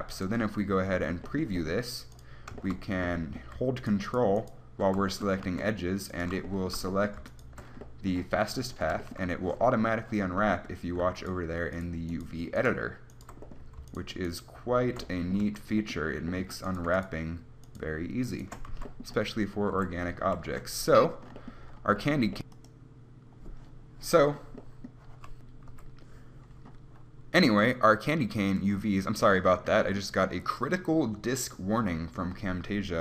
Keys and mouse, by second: 0.4 click, 0.6 click, 5.8 a, 7.4-9.2 drag, 13.8-15.4 right drag, 15.7 a, 19.0 a, 20.0 KP_1, 20.4 a.